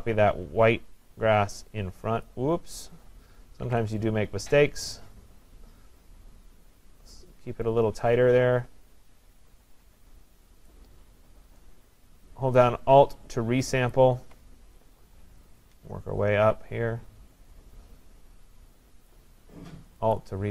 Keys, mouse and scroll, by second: 2.3 click, 3.7 ctrl+z, 10.7 click, 13.9 alt+click, 19.1 click, 20.2 click.